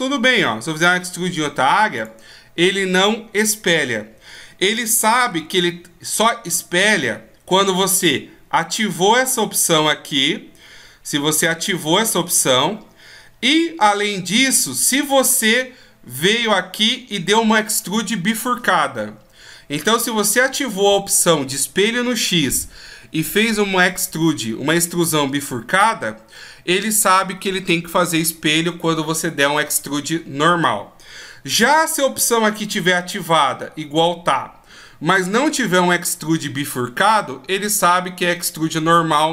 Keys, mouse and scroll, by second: 4.9 ctrl+z.